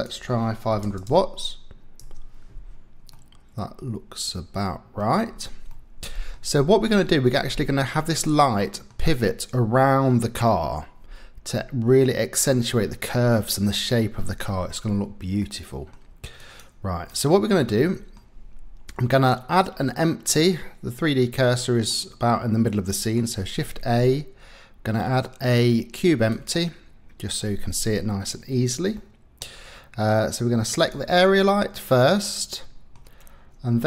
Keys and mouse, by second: 1.1 KP_0, 3.1-5.0 middle drag, 5.7 middle click, 6.8 middle click, 8.6 click, 15.4 click, 17.7 click, 20.3-21.9 drag, 22.6 click, 23.5 shift+a, 29.0 middle click, 32.0 click.